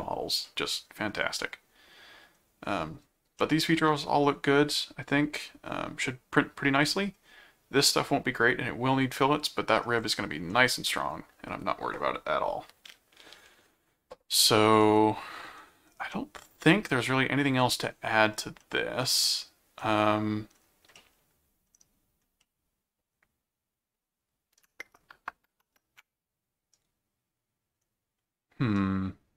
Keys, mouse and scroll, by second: 0.5 middle click, 1.4 middle click, 3.4-7.1 middle drag, 9.1 middle click, 10.3 scroll up 2, 10.5 middle click, 14.8 middle click, 16.1-17.8 middle drag, 18.6 middle click, 19.8 middle click, 20.9 middle click, 22.4-29.3 middle drag.